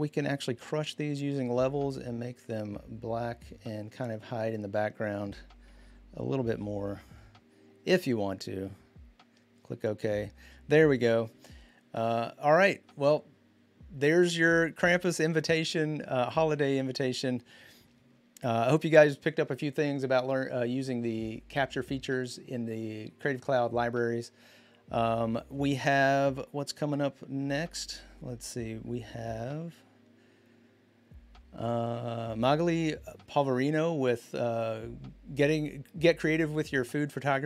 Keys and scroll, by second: 0.3 ctrl+l, 6.3 ctrl+l.